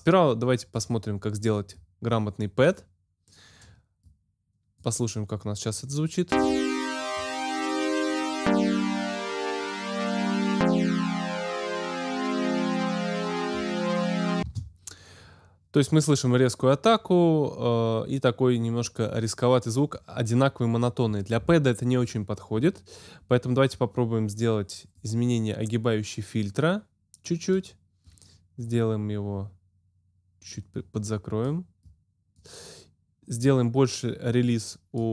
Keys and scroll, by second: 14.4 space.